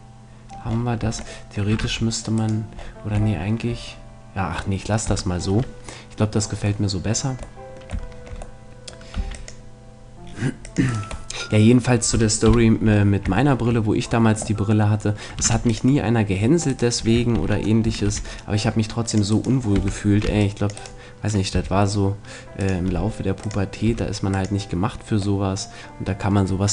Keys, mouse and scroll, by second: 1.0 Tab, 1.8 ctrl+r, 2.5 ctrl+middle click, 9.1 c, 10.9-12.7 right drag, 11.3-13.1 middle drag, 12.5 KP_7, 15.5 ctrl+r, 17.1-18.6 right drag, 17.3 ctrl+z, 18.0 ctrl+r, 19.1-21.1 drag, 19.3-21.3 right drag, 19.7 a, 20.3 c, 21.5 g, 22.7 click, 22.9 r, 23.9 s, 25.4 middle click, 25.6 click.